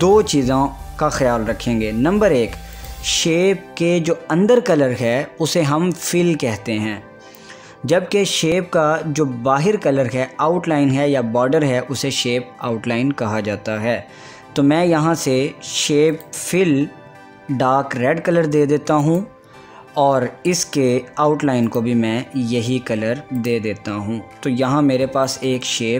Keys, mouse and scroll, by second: 2.8 click, 16.2 click, 17.0 click, 19.2 click, 23.6-25.9 drag.